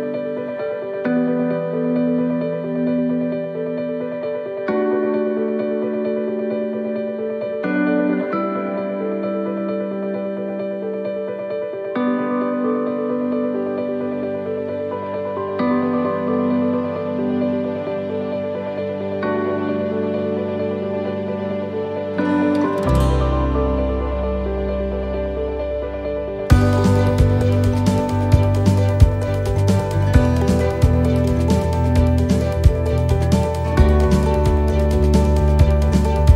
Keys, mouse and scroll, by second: 1.0 right click, 2.3 shift+middle click, 3.7 click, 11.0 shift+middle click, 11.7 scroll up 1, 12.2 scroll down 1, 13.1-13.5 scroll down 1, 14.3 click, 15.4 right click, 16.3 click, 17.9 shift+middle click, 18.9 ctrl+r, 22.8 ctrl+r, 24.8 shift+middle click, 30.8 middle click, 32.3 shift+middle click, 32.9 middle click, 33.6 shift+middle click, 34.2-34.8 scroll up 6, 34.8 shift+middle click, 35.7 scroll down 5, 35.8 shift+middle click.